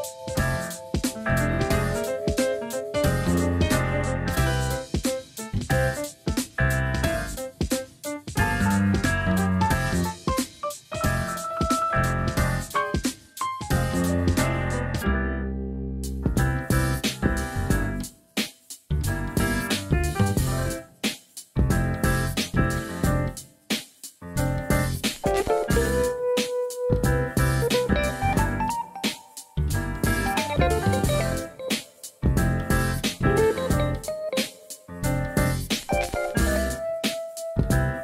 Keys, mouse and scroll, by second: 0.0 s, 0.8 click, 1.7 r, 2.1 click, 2.4 g, 5.5 middle click, 6.7-7.7 drag, 7.7 KP_3, 8.6 right click, 11.0-12.0 drag, 12.0 s, 12.4 click, 13.6 middle click, 14.4 KP_1, 15.1 alt+z, 16.4 s, 17.5 s, 18.6 g, 19.8 shift+middle click, 21.6 click, 23.1 ctrl+r, 23.5-24.8 drag, 25.0 click, 26.0-27.5 drag, 29.7 click, 30.2 click, 30.7 click, 31.0 Tab, 31.8 alt+z, 32.2-34.7 middle drag, 35.5-36.2 middle drag, 36.3 Tab, 36.8-38.0 middle drag.